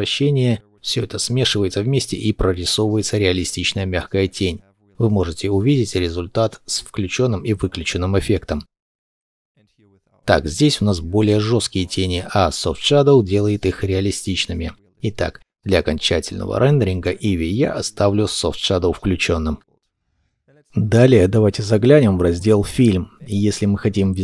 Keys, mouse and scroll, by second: 6.3 shift+middle click.